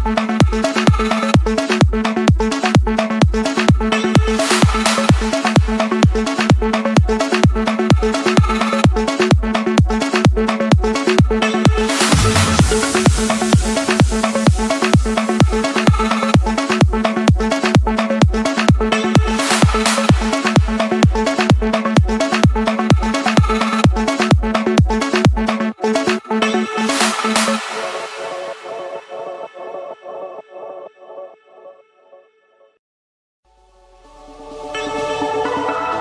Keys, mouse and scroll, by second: 0.0 Return, 1.9 click, 2.2 Return, 2.4 Return, 3.0 Return, 4.2 click, 4.5 Return, 4.8 Return, 5.4 Return, 6.7 click, 7.0 Return, 7.4 Return, 8.1 Return, 9.2 click, 9.6 Return, 10.1 Return, 10.8 Return, 12.6-13.7 drag, 14.1 click, 14.7 scroll down 1, 14.7 middle click, 14.8 middle click, 15.1 Return, 16.7 Return, 17.2-18.3 drag, 19.0 r, 19.4 Return, 20.1 2, 20.5 Return, 21.1 Return, 21.7 Return, 24.0 Return, 25.3 click, 25.9 click, 26.9 click, 27.6 click, 27.9 scroll, 29.0 click, 29.3 scroll, 29.6 Return, 31.4-32.5 drag, 32.6-34.0 typing, 32.9 Return, 34.1 Return, 34.6 Return, 35.0 Return, 35.5 Return.